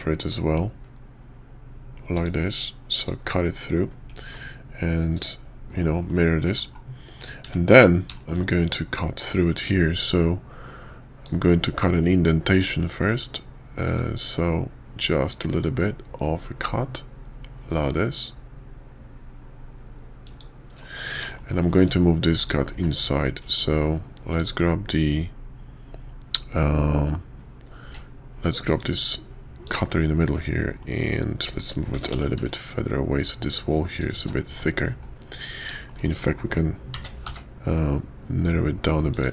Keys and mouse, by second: 4.2 alt+x, 5.1 click, 6.1-6.6 middle drag, 8.1 shift+middle click, 11.2-20.4 drag, 20.8 middle click, 21.3 shift+click, 21.7 shift+click, 22.4 click, 22.7 q, 27.8 q, 30.8 click, 31.9 g, 34.6 drag, 35.7 shift+drag, 36.0 click, 36.9 s.